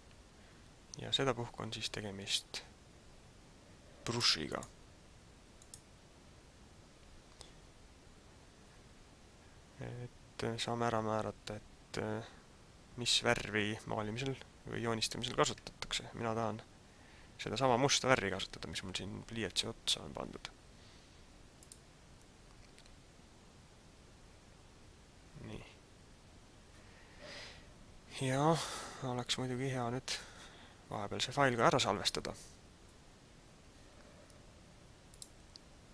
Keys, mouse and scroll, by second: 4.5 click, 5.6 click, 21.5 click, 35.1 click.